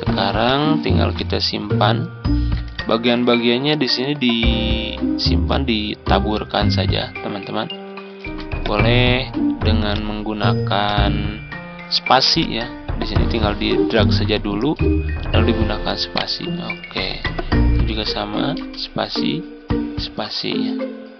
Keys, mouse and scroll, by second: 2.6 ctrl+click, 3.4-5.0 drag, 5.4-7.7 drag, 8.1 ctrl+d, 8.5-10.5 drag, 10.7-16.0 drag, 16.0-17.0 right drag, 18.0-19.0 drag, 19.0 space.